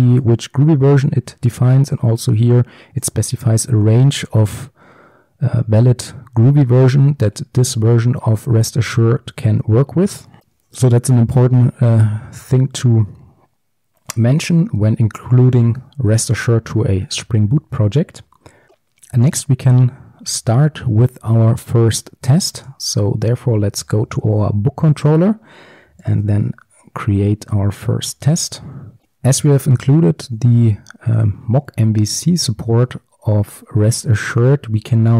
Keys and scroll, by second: 20.5 alt+1, 26.2 alt+1, 26.7 ctrl+shift+super+t, 29.0 ctrl+x.